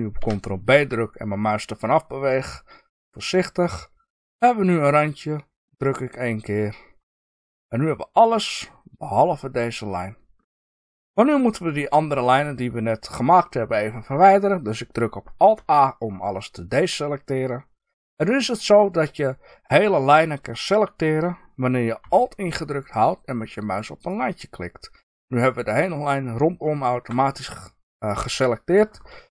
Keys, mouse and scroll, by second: 0.6 ctrl+b, 5.8 click, 6.5-11.1 middle drag, 12.9-15.5 middle drag, 15.5 alt+a, 23.9 alt+click.